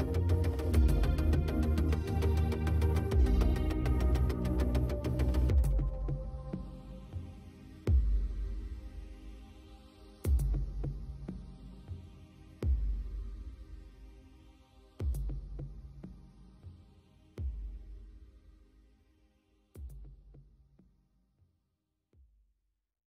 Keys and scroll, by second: 11.4 space, 15.0 space.